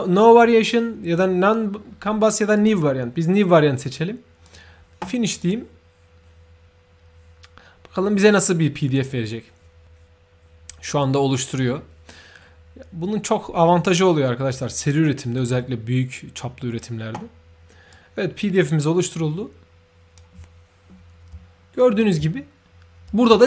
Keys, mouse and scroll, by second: 2.5 shift+click, 4.4 shift+click, 17.9-20.1 shift+drag, 21.5 ctrl+shift+middle click.